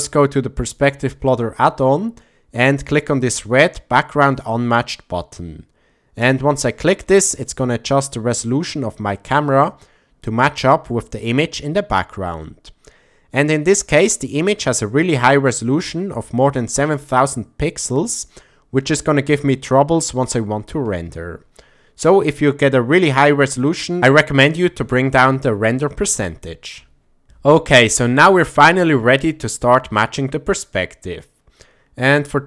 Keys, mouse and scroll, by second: 6.2 click, 6.3-6.9 scroll up 1, 6.9 shift+scroll up 1, 7.2 shift+middle click, 24.2-25.6 drag.